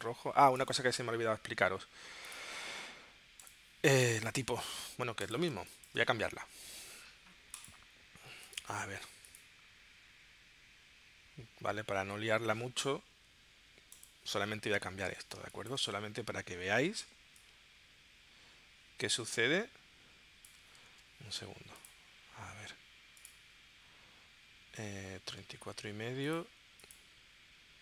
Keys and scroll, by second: 5.6 space, 15.4 space, 20.9 super+z.